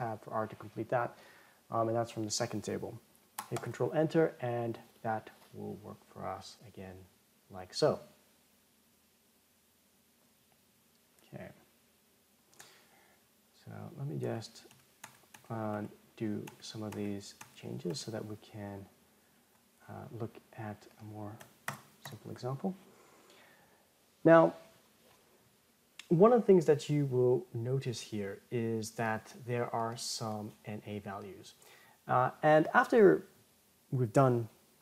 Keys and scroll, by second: 4.0 ctrl+Return, 15.7 ctrl+z.